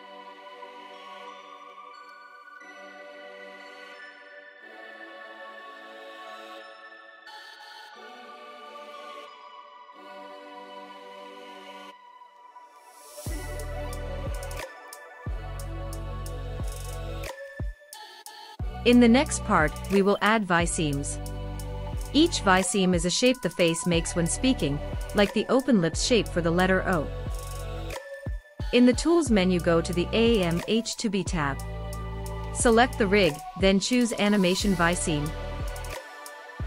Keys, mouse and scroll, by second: 2.0 click, 3.5-5.0 drag, 5.2 click, 6.5 middle click, 8.1-10.0 middle drag, 11.3 middle click, 12.9-16.4 middle drag, 19.3 middle click, 24.3 middle click, 35.6-36.6 drag.